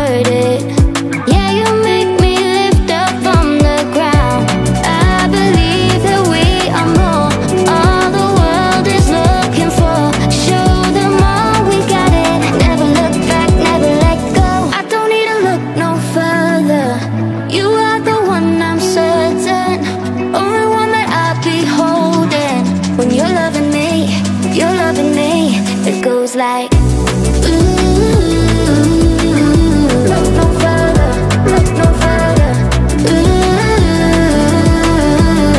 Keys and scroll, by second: 2.5 space, 14.8 Delete, 17.0 BackSpace, 23.5-24.8 typing, 28.1-30.5 typing, 30.9 Return, 31.7 w, 33.1-35.5 typing.